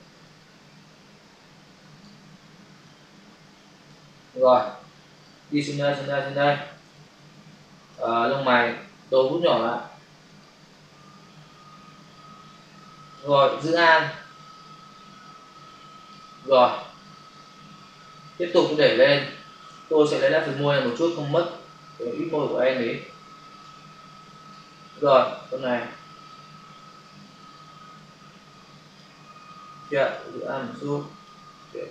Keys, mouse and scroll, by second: 0.2 click, 2.8 click, 5.1 click, 6.9 ctrl+click, 9.0-9.5 typing, 10.3 click, 14.3 alt+click, 16.7 space, 20.9 typing, 22.0 click, 24.2 click, 25.8 click, 30.2 alt+click, 31.8 alt+click.